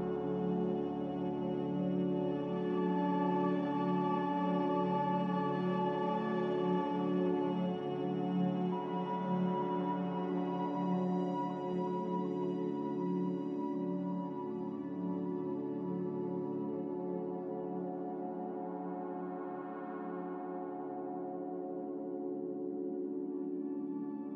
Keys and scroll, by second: 22.2 Escape, 22.6 Escape, 23.5 s.